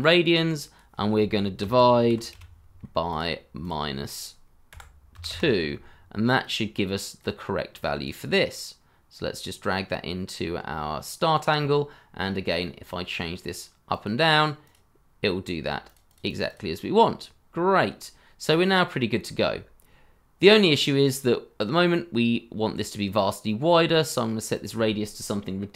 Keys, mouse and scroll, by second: 1.7-2.8 typing, 4.0 double click, 4.7 KP_Subtract, 5.1 KP_2, 5.3 Return, 13.9 double click, 17.9-19.2 scroll down 1.